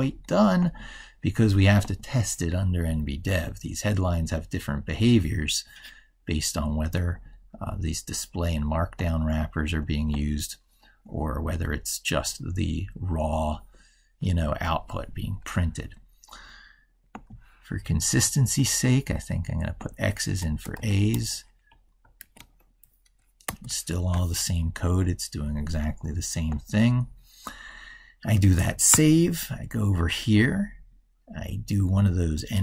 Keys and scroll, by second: 22.1 ctrl+s, 28.7 ctrl+super+Right.